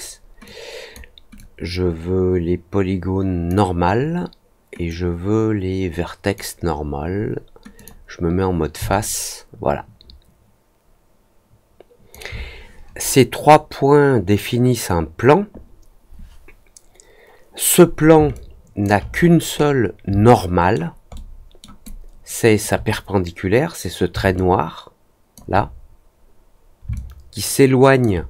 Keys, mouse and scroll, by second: 0.4-0.9 drag, 1.3-3.4 drag, 4.8-6.3 drag, 7.7 click, 8.9-12.0 alt+drag, 18.3 alt+click, 19.1 middle click, 19.5-19.8 scroll up 2, 20.2 alt+middle click, 21.1 alt+middle click, 21.8 alt+click, 24.3 alt+click, 26.9-27.9 alt+drag.